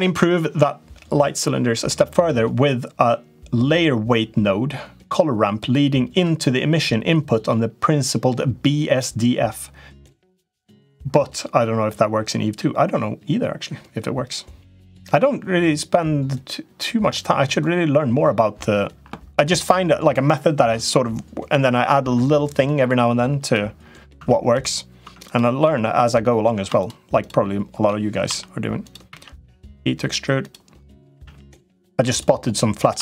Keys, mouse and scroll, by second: 24.0 Tab, 24.3 click, 24.8 Tab, 25.1 click, 25.5 Tab, 26.5 shift+click, 27.1 shift+click, 28.1 i, 28.9 e, 30.9 a, 31.1 g, 32.9 shift+click.